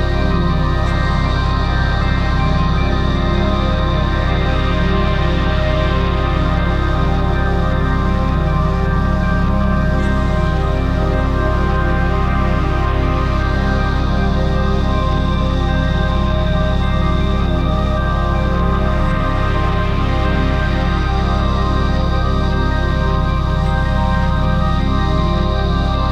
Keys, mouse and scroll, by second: 15.5 right click, 16.8 right click, 17.0 right click, 17.3 right click.